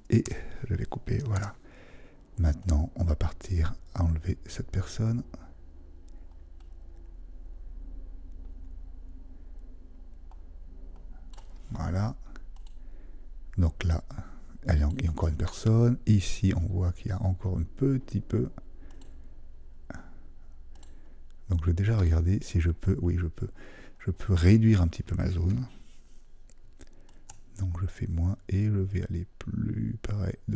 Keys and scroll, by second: 1.3 super+d.